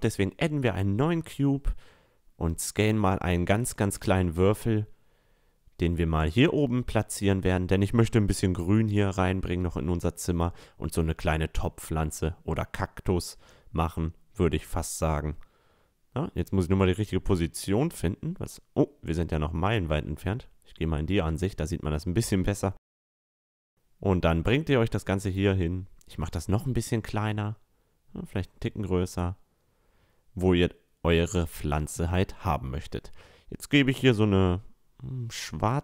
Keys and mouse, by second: 0.4 s, 2.1-4.0 drag, 4.0-5.8 middle drag, 4.2 s, 5.8-10.1 drag, 10.2-18.7 drag, 17.9-23.7 middle drag, 17.9-18.4 right drag, 18.5 right click, 19.1-24.0 drag, 19.1-21.5 right drag, 24.7 s, 26.0-31.2 drag, 27.0 s, 30.7-33.8 middle drag, 32.3-34.0 drag, 34.1-35.8 middle drag.